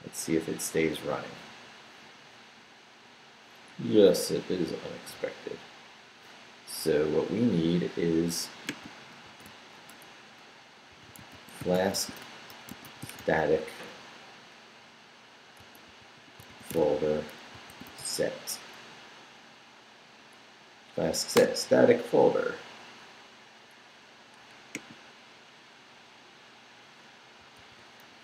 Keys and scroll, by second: 9.3 super+t, 10.7-13.7 typing, 15.3-18.5 typing, 20.9 Down, 21.3 Return.